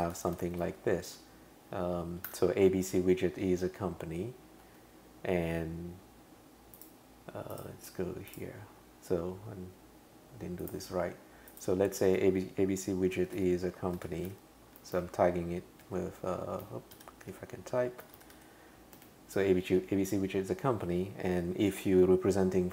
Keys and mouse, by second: 0.0-2.8 typing, 4.6 Return, 7.5 click, 13.2-18.8 typing, 19.0 Return.